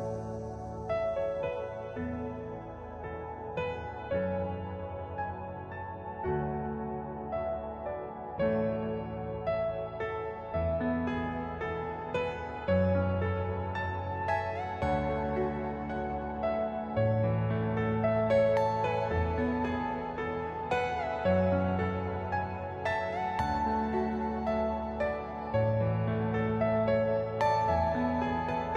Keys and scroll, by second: 1.3 alt+c, 4.7 Escape, 5.0 F2, 17.5 shift+Page_Up, 18.8 F2, 23.3 shift+Page_Up.